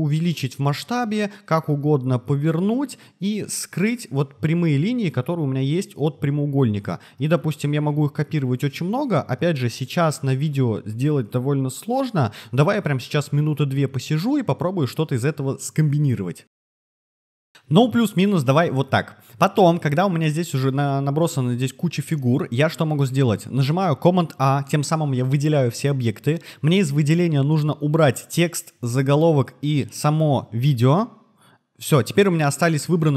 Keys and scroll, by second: 6.8 super+c, 7.0 super+v, 9.1 super+c, 9.3 super+v, 16.6 super+v, 16.9 super+v, 24.0 super+a.